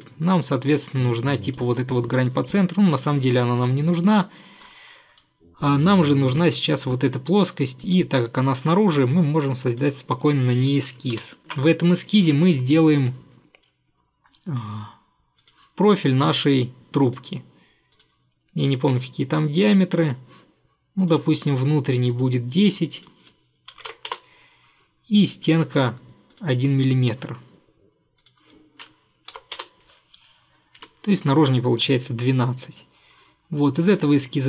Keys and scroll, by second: 11.3 ctrl+8, 23.6-24.5 typing, 29.4 typing, 29.7 Return, 30.9 Escape.